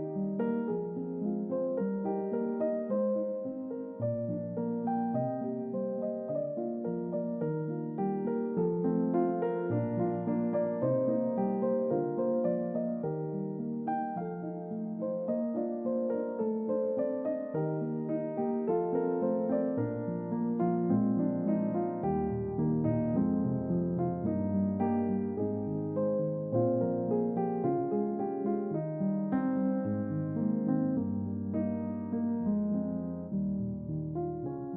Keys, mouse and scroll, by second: 0.7-1.0 scroll down 2, 1.1-2.3 middle drag, 5.5-6.6 drag, 8.2 click, 11.5 click, 13.3 click, 20.5 click, 22.1 click, 23.3 click, 26.8 click, 31.0 click, 33.0 click.